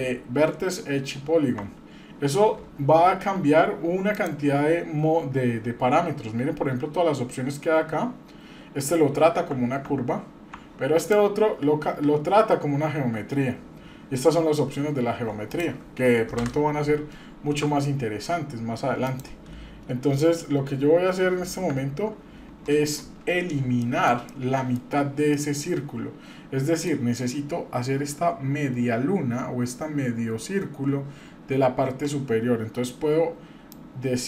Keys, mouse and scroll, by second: 2.2 Tab, 2.6-2.9 scroll down 1, 3.1-3.6 scroll up 1, 4.1 click, 9.5 Tab, 9.8 Tab, 11.0 click, 15.5 click, 16.4 Delete, 16.4 /, 17.0-17.4 scroll down 2, 19.0 click, 21.7 KP_Divide, 22.8 click, 23.3-23.8 scroll down 2, 23.8-24.2 shift+middle drag, 24.3-24.8 middle drag, 24.8-25.3 scroll down 2, 25.3-26.9 middle drag, 33.7-34.2 drag.